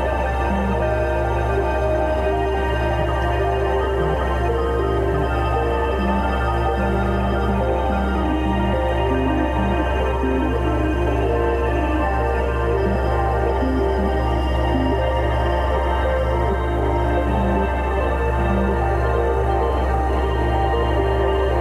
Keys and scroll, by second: 0.0-2.2 typing, 3.6 ], 4.1 [, 5.3 ], 6.0 space, 7.2 space, 7.8 space, 8.6 space, 9.4 space, 12.1 ], 13.2 x, 14.0 space, 14.3 x, 15.6 ], 17.7 x, 18.8 x, 20.2 x, 20.9 space.